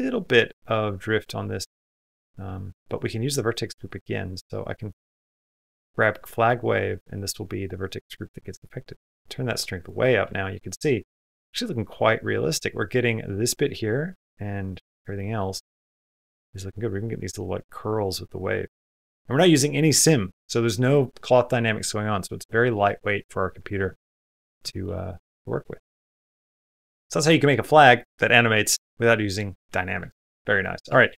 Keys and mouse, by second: 0.2 middle click, 3.7-4.7 drag, 5.9 middle click, 6.7-8.2 middle drag, 9.0 click, 10.3 middle click, 10.9 middle click, 12.0 middle click, 13.4 middle click, 15.0 middle click, 16.1-17.2 middle drag, 18.6 middle click, 19.2 middle click, 21.6 middle click, 22.1 middle click, 22.5 middle click, 23.2 middle click, 23.8 shift+middle click, 24.1 middle click, 24.5 shift+middle click, 24.7 middle click, 25.2 shift+middle click, 26.0 shift+middle click, 26.7 middle click, 30.0 shift+middle click, 30.4 middle click, 30.8 shift+middle click.